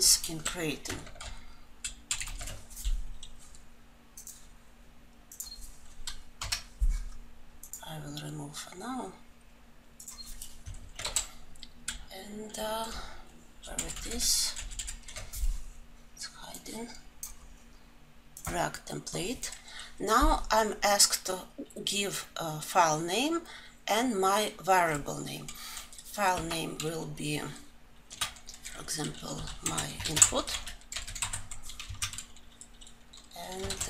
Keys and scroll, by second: 7.8 Delete, 11.1 Delete, 11.7 alt+Insert.